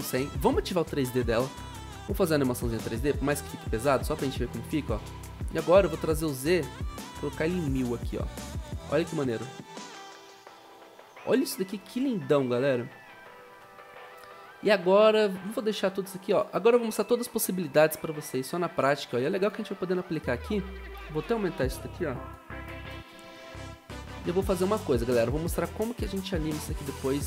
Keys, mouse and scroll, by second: 13.4 0, 22.7 u.